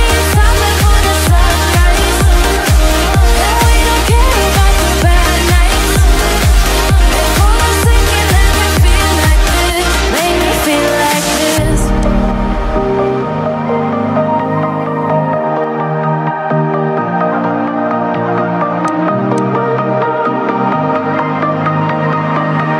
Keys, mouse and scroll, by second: 0.4 click, 1.4 click.